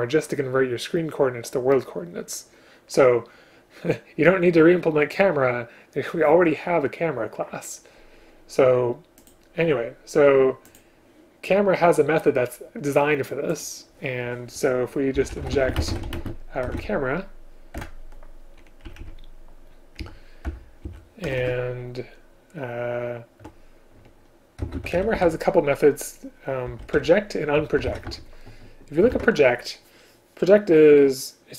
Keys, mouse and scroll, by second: 15.8 space, 16.2 space, 17.8 Return, 18.9 Down, 19.0 Down, 20.5 Return, 20.9 Up, 21.3 Tab, 29.2 ctrl+q.